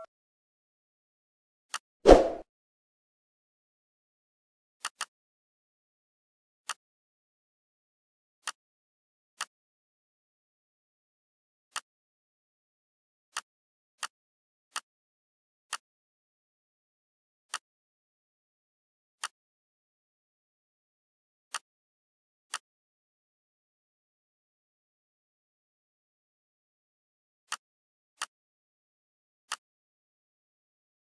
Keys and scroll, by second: 25.9 ctrl+g.